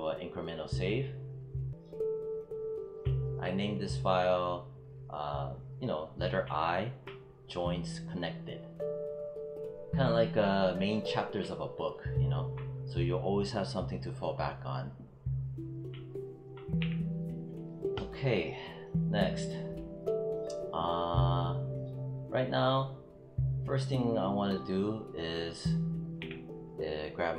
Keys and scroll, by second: 16.7 w, 26.0 w.